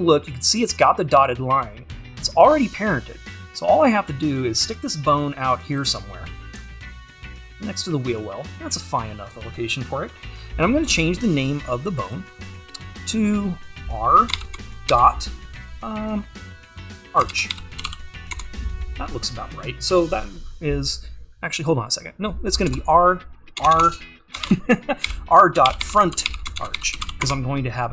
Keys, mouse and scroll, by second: 6.3 scroll up 1, 18.4-27.3 drag.